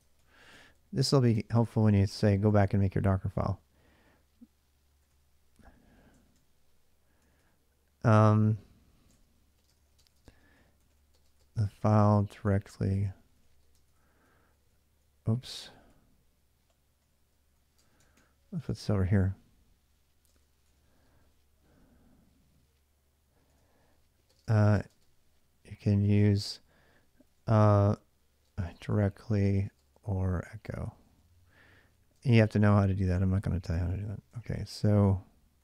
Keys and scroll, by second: 0.0-3.6 typing, 4.7 d, 4.9 d, 6.0 ctrl+[, 6.1-20.7 typing, 23.7-35.6 typing.